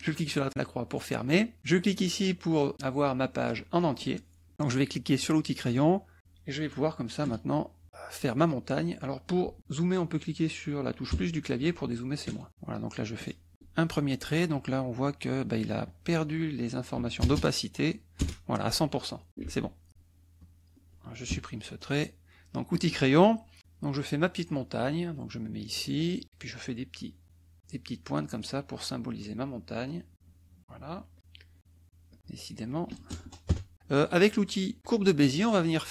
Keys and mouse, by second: 0.0 click, 3.5 click, 5.2 click, 7.2 KP_Add, 11.1 KP_Add, 11.6 KP_Subtract, 12.3 KP_Add, 13.2 click, 15.8 click, 16.9 KP_1, 17.2 KP_0, 18.2 Return, 19.5 ctrl+z, 20.4 click, 21.3 Delete, 22.7 click, 25.7-31.6 drag, 32.1 click, 33.1 KP_0, 33.5 KP_Enter, 34.8 click.